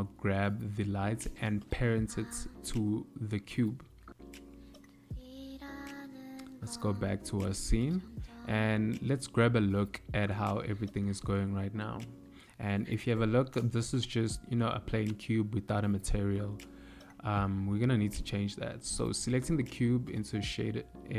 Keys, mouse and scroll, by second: 6.2 click, 7.6 shift+middle click, 10.7 click, 15.0 click, 16.3 click, 18.1 click, 21.0 n.